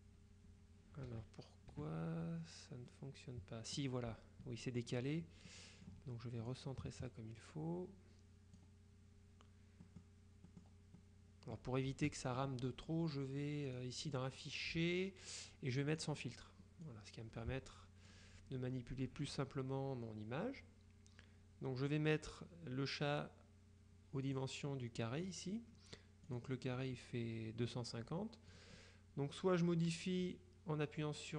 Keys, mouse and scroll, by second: 1.1 KP_Subtract, 2.3 KP_Subtract, 3.0-4.3 drag, 5.6 click, 6.6-9.1 drag, 9.9 click, 11.1 click, 13.8 click, 16.0 click, 16.9-18.7 drag, 24.4 click, 25.3 click, 26.4 click, 28.6 click.